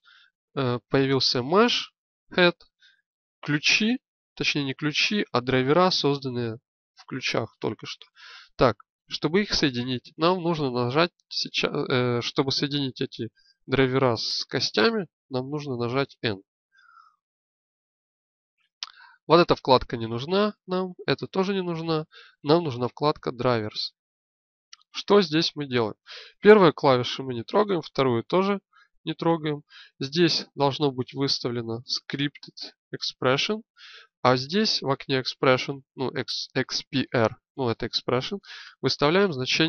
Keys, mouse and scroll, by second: 15.2 n.